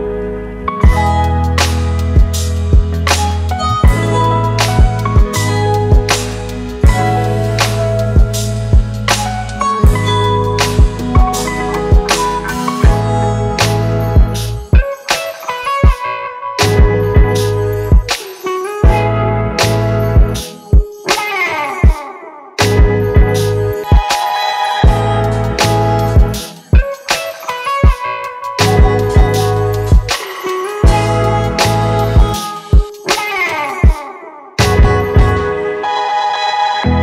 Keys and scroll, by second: 0.0-1.4 typing, 5.2 Return.